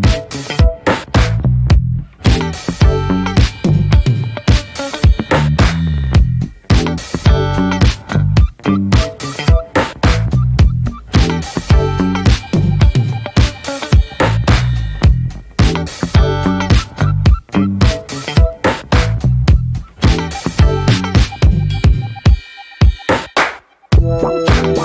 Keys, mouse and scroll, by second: 0.0 middle click, 0.7 click, 1.2 middle click, 1.4-1.8 scroll up 1, 1.9 alt+middle click, 2.4 scroll up 1, 2.5 shift+middle click, 2.9 ctrl+z, 3.8-5.0 drag, 5.0-5.4 scroll down 2, 5.4 middle click, 5.8 scroll up 1, 7.7 alt+middle click, 8.3 scroll up 3, 8.5 shift+middle click, 8.7 scroll down 1, 8.8-11.2 shift+middle drag, 11.2 click, 11.6 scroll down 2, 11.8 scroll up 1, 12.0-12.6 shift+middle drag, 12.6 click, 12.8-14.4 scroll up 2, 14.4-15.8 drag, 18.9 click, 19.1-19.7 scroll down 5, 19.3 middle click, 19.7 middle click, 20.1 scroll up 1, 20.2 scroll down 2, 20.4 shift+middle click, 20.5-21.2 scroll up 3, 20.8 shift+middle click, 21.5 shift+middle click, 21.8 scroll up 2, 22.0 shift+middle click, 22.5 scroll up 1, 22.7-24.2 shift+middle drag, 24.2 click, 24.4-24.8 scroll down 7.